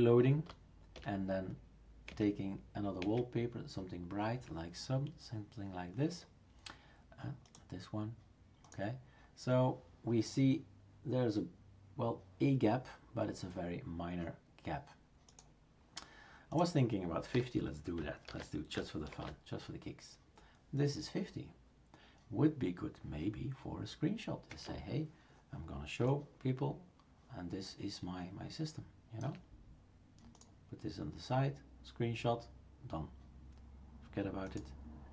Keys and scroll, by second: 0.9 alt+Right, 2.1 alt+Right, 3.0 alt+Right, 17.3-18.2 typing, 18.2 ctrl+s, 19.1 shift+super+r, 24.5 Left.